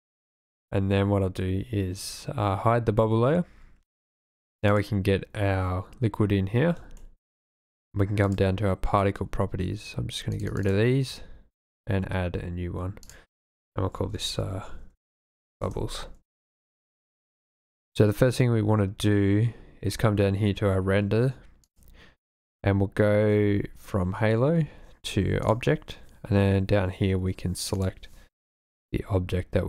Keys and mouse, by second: 0.2 click, 7.1 shift+middle drag, 10.6 click, 10.7 click, 13.2-15.7 drag, 21.8 click.